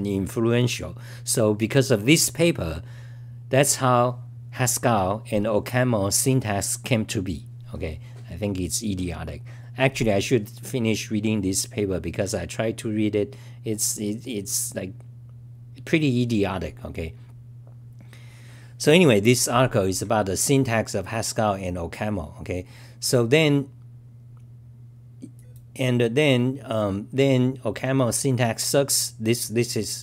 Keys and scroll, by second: 20.0-20.8 typing.